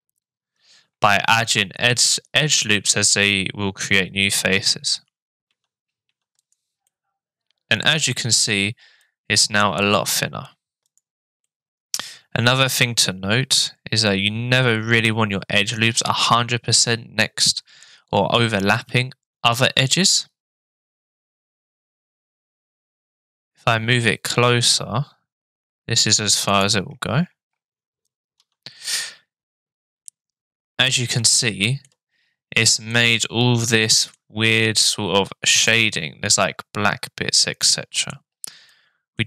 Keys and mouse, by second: 5.5 Tab, 6.0 Tab, 6.4 right click, 6.8-8.1 middle drag, 9.0-10.8 middle drag, 11.4 middle click, 18.7 ctrl+r, 28.4 Tab, 28.9-30.1 drag, 31.3 shift+click, 31.4-31.8 shift+middle drag, 32.9-34.1 middle drag, 35.7-38.1 middle drag, 38.7-39.2 middle drag.